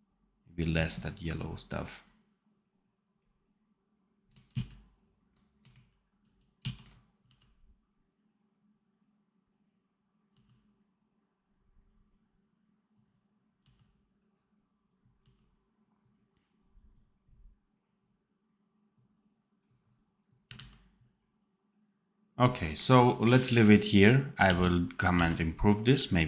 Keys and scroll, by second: 4.4 ctrl+z, 6.5 ctrl+shift+z, 7.1 d, 10.2 d, 13.5 d, 20.4 d, 24.3 d, 25.0 v.